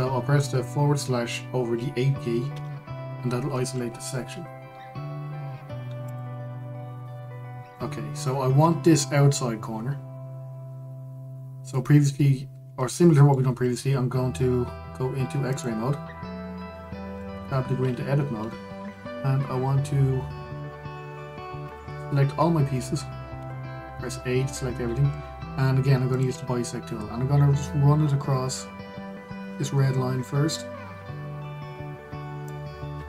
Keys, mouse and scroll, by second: 3.2 KP_Divide, 6.7 click, 13.2-13.6 scroll up 1, 13.6-16.2 shift+middle drag, 16.2-18.0 drag, 18.0 Tab, 22.3-24.1 drag, 24.1 a, 26.8-29.8 drag.